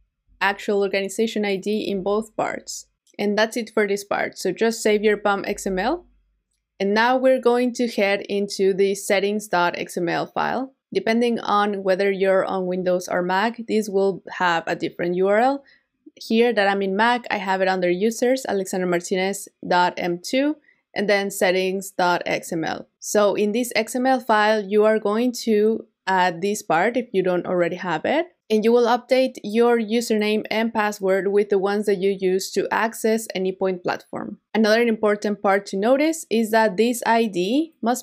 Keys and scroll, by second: 5.5 super+s.